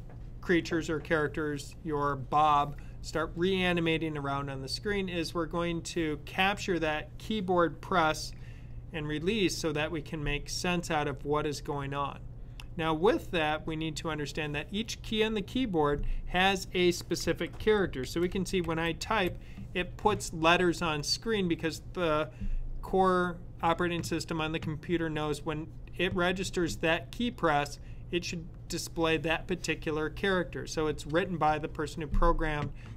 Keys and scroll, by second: 16.6-18.9 typing.